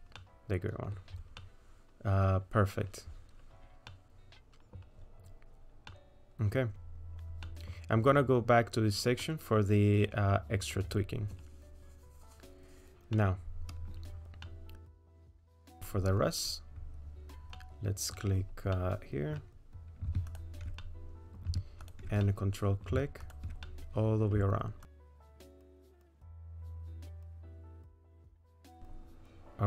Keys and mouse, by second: 0.2 middle click, 1.4-2.8 middle drag, 3.9 middle click, 5.9 middle click, 7.4 middle click, 9.2-11.3 middle drag, 13.2 middle click, 14.5 middle click, 17.6 middle click, 17.8 click, 17.8 right click, 18.0 middle click, 18.7 middle click, 20.3 ctrl+click, 20.8 middle click, 21.9 ctrl+click, 22.2 middle click, 23.3 ctrl+click, 23.6 middle click, 25.3 middle click, 26.2 middle click, 27.1 middle click, 27.6 middle click, 28.1 ctrl+click, 28.4 middle click.